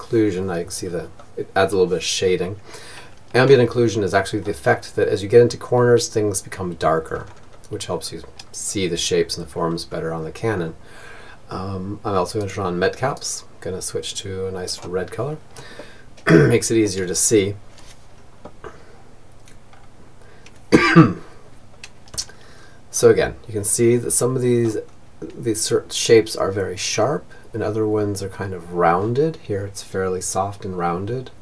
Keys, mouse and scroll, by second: 0.4-2.8 middle drag, 3.1-5.3 middle drag, 5.5-10.0 middle drag, 10.8-13.3 drag, 13.4 click, 14.2-15.9 middle drag, 20.7-25.5 middle drag.